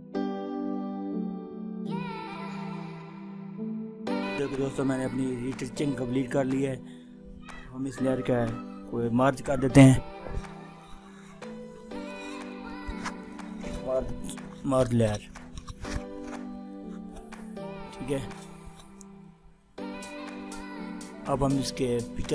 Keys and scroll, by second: 22.2 ctrl++.